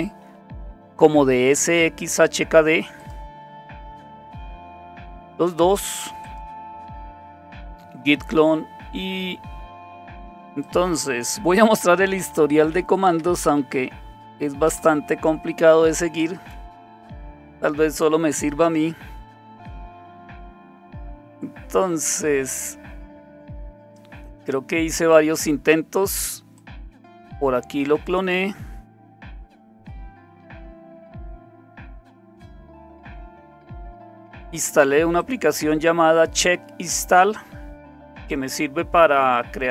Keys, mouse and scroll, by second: 1.8-3.0 scroll down 1, 3.0 click, 6.2 click, 9.8-11.5 drag, 11.8-13.6 typing, 13.8 Tab, 14.7 Return, 16.7-17.5 scroll up 1, 17.5-18.5 scroll up 1, 18.5-19.0 scroll up 1, 19.0-20.1 scroll up 1, 20.1-20.7 scroll up 1, 20.7-21.4 scroll up 1, 21.4-24.1 scroll up 1, 21.9 typing, 24.1-25.1 scroll down 1, 24.2 typing, 25.1-26.6 scroll down 1, 26.6-27.9 drag, 28.6-29.6 scroll down 1, 28.7-29.4 typing, 30.9-33.4 scroll down 1, 35.2-36.4 drag.